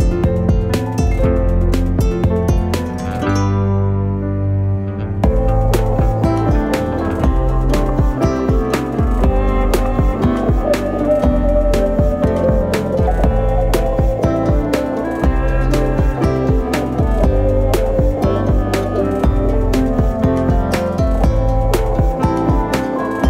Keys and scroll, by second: 1.0 shift+s, 1.6 shift+a, 3.3 a, 3.5 s, 4.4 e, 6.2 ctrl+2, 6.8 ctrl+r, 7.4 ctrl+r, 8.5 ctrl+r, 15.8 g, 15.8 y, 17.3 shift+d, 17.6 y, 18.9 s, 19.0 z, 20.1 shift+d, 20.2 z, 21.2 s.